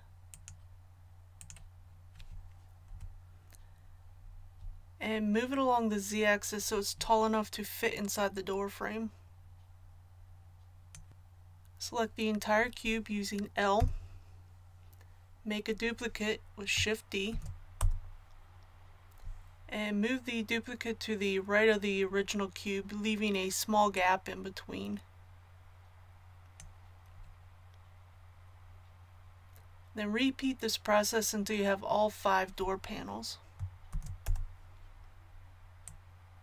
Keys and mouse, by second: 2.9 KP_1, 10.0 click, 13.7 l, 17.3 shift+d, 23.9-25.8 drag, 33.9 shift+d, 35.8-36.4 drag.